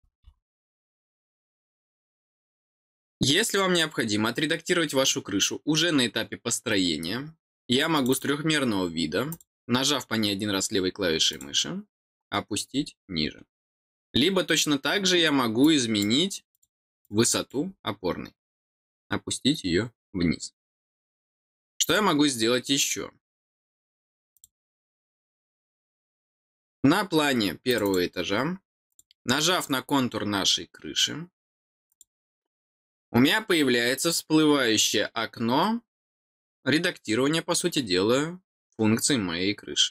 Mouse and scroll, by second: 7.9 click, 9.2 click, 11.2 click, 15.6 click, 16.5 click, 17.0 click, 21.8 click, 24.3 click, 27.6 click, 27.8 click, 28.8 click, 31.8 click.